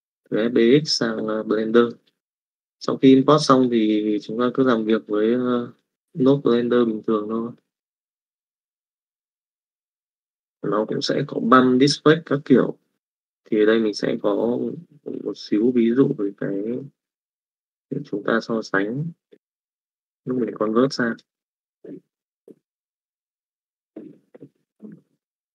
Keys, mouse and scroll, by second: 1.6 middle click, 5.8 click, 6.7 click, 8.3 middle click, 8.7 click, 9.6 n, 10.6 middle click, 13.6-15.0 drag, 15.3 middle click.